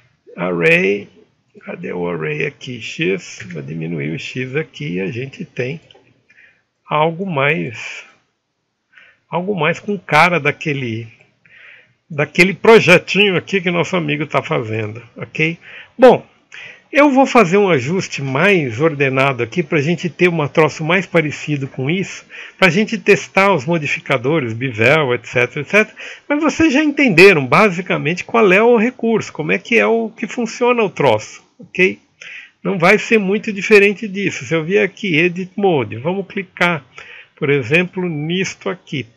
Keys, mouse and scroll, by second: 13.6 e.